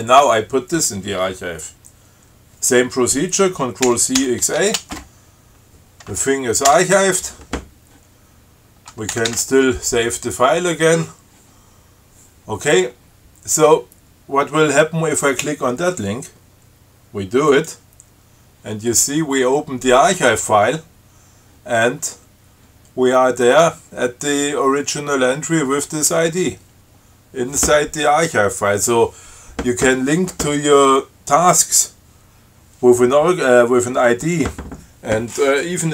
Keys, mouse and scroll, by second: 4.1 ctrl+c, 4.4 ctrl+x, 4.8 ctrl+a, 6.9 Return, 9.4 ctrl+x, 9.5 ctrl+s, 10.6 scroll up 2, 11.2 scroll up 2, 13.0 scroll down 2, 13.4-13.7 scroll up 2, 17.8 click, 27.3-27.6 scroll down 2.